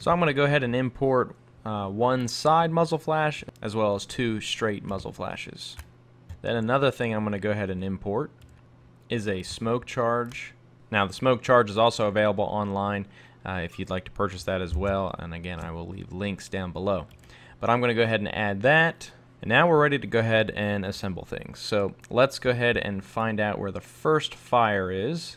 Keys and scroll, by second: 6.3 super+Tab, 10.8 super+Tab, 15.7 super+Tab.